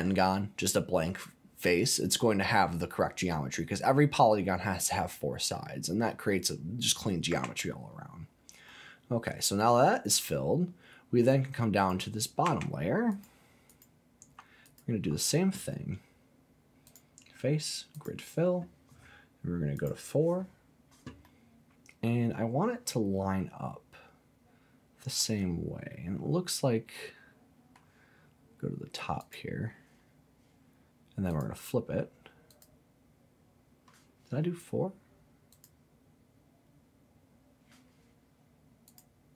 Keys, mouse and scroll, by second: 5.1-5.5 scroll down 2, 5.5 middle click, 6.6 scroll up 2, 7.3 Tab, 7.9-8.2 scroll up 2, 8.2-8.7 scroll down 2, 8.7-11.2 middle drag, 11.2 scroll down 1, 11.7 click, 12.4 Tab, 13.1 click, 13.7 click, 14.6 alt+click, 16.8-18.0 drag, 19.7 click, 21.2-27.8 middle drag, 29.2 click, 31.3 click, 32.5 click, 35.5 click, 38.8 click.